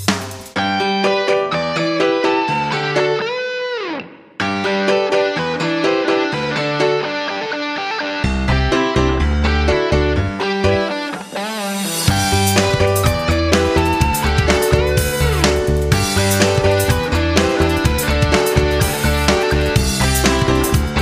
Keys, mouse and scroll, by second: 2.1 Right, 2.3 Right, 7.0 click, 11.6 F9, 13.3 ctrl+click, 17.9 3, 20.3-21.0 typing.